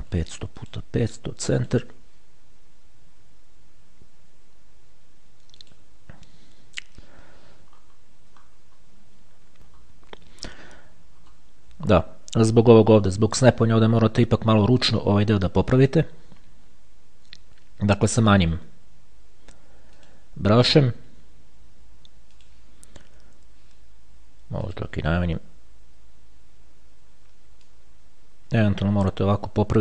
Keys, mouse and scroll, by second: 0.2 KP_5, 0.8 click, 0.8 KP_0, 1.8 click, 5.8 click, 7.9-9.0 ctrl+scroll up 2, 9.0-9.5 scroll up 1, 9.9-10.9 shift+scroll up 1, 11.5-12.1 shift+scroll up 1, 12.2-12.7 shift+scroll down 1, 20.3 click, 22.6 click, 24.9 click, 27.9-29.8 drag.